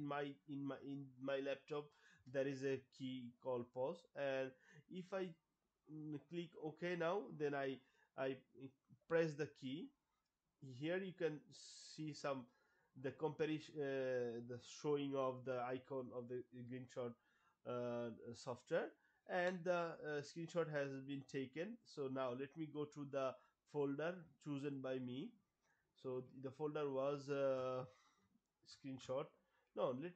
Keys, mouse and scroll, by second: 6.4 click, 9.1 Pause, 21.3 click, 22.7 click, 24.7 click, 29.9 click.